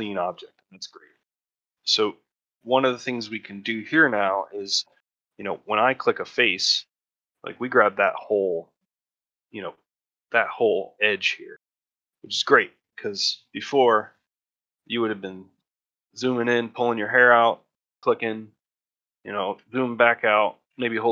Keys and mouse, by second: 0.3 shift+middle click, 0.6 middle click, 1.0 shift+middle click, 1.4 ctrl+middle click, 2.1 shift+middle click, 2.9 shift+middle click, 3.3 ctrl+middle click, 3.8 shift+middle click, 6.9 ctrl+middle click, 7.4 shift+middle click, 12.0 middle click, 13.4 middle click, 14.5 middle click, 15.0 ctrl+middle click, 15.5 shift+middle click, 15.9 ctrl+middle click, 17.3 shift+middle click, 18.6 ctrl+middle click, 18.9 shift+middle click, 19.7 shift+middle click, 20.1 ctrl+middle click.